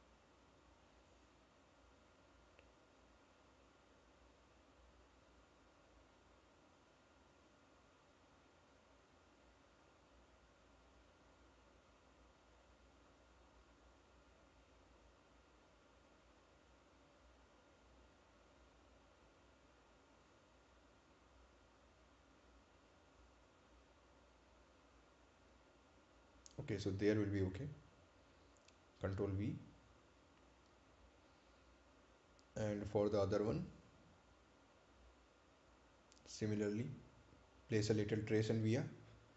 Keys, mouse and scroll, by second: 1.6 click, 6.0 right click, 8.4 click, 19.7 Delete, 22.6 click, 26.4 click, 27.4 right click, 28.4-28.8 scroll up 1, 29.4 ctrl+v, 30.5 click, 31.3 scroll down 1, 32.7 right click, 34.0 ctrl+click, 35.9-36.4 scroll up 1, 36.8 scroll down 1, 39.1 click.